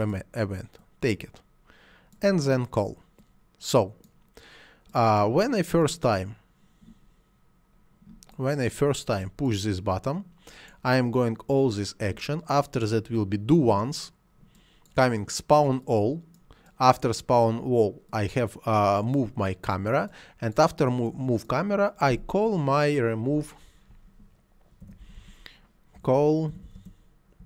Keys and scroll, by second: 22.1 c, 24.8-26.8 typing.